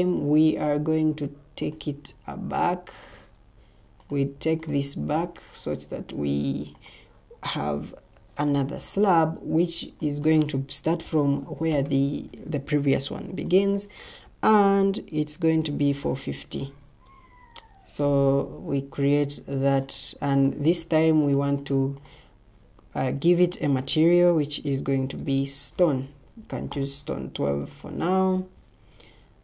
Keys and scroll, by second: 8.1 ctrl+t, 11.0-12.1 typing, 15.2-16.4 typing, 25.1-25.7 typing.